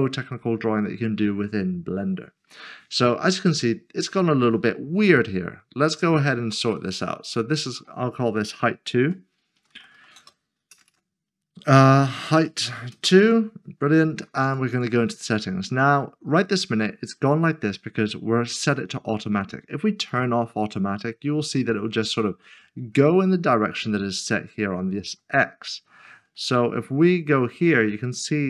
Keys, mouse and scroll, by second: 7.2 click, 8.6-10.9 typing, 12.3-13.2 typing, 14.4 click, 14.8 double click, 15.2 scroll down 1, 20.1 click, 25.2 middle click, 26.3 shift+middle click, 28.2 scroll up 1.